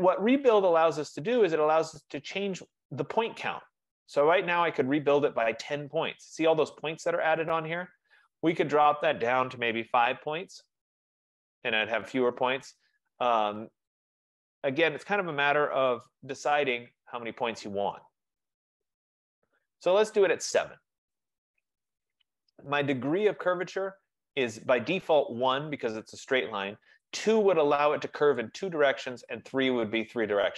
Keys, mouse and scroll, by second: 1.1 click, 9.1 click, 9.8 5, 10.1-10.5 Tab, 14.6 click, 15.5 7, 15.8-19.7 drag, 16.0 Tab, 27.3 click, 28.7 click.